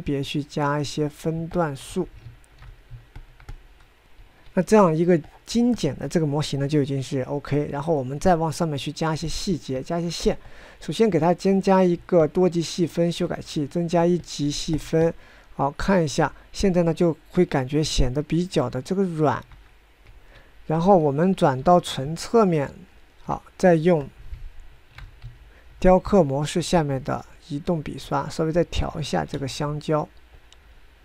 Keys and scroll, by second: 3.1 ctrl+Tab, 5.1 9, 21.1 9, 22.6 1, 25.3 ctrl+Tab, 25.8 ctrl+Tab, 25.9 ctrl+Tab, 26.0 ctrl+Tab, 30.3 ctrl+z.